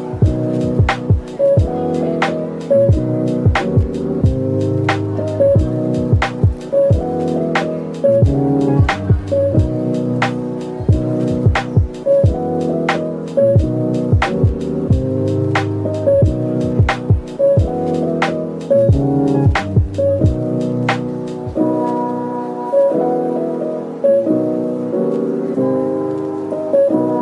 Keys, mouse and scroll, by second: 1.5-2.1 scroll down 1, 2.1 middle click, 4.6 Tab, 5.1 middle click, 5.7 shift+click, 6.7-7.1 scroll down 1, 7.1 middle click, 13.2 z, 15.1 double click, 17.5 double click, 21.1 shift+click, 23.4 shift+click.